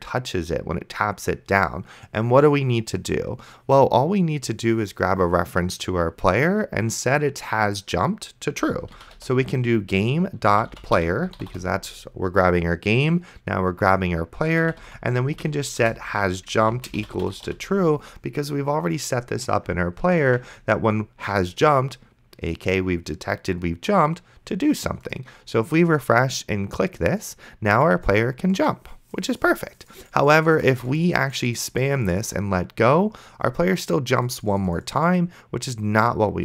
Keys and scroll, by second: 8.7-12.0 typing, 14.4-18.0 typing, 20.5 ctrl+s.